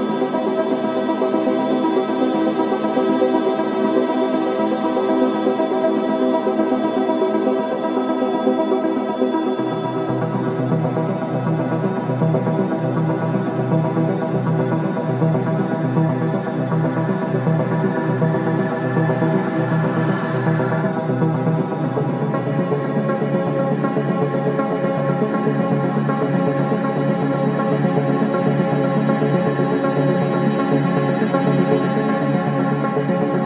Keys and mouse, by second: 5.7 shift+click, 7.8 ctrl+p, 17.4 g, 19.5 click, 31.6 click.